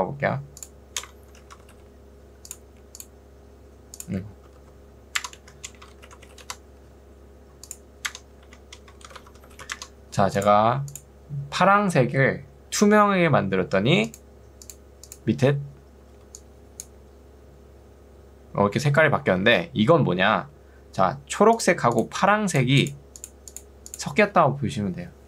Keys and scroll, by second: 0.0-2.1 typing, 4.6 ctrl+z, 5.4 Right, 6.0 c, 6.4 r, 6.6 Return, 8.4 Right, 8.9-9.9 typing, 16.2 ctrl+2, 19.4 Escape.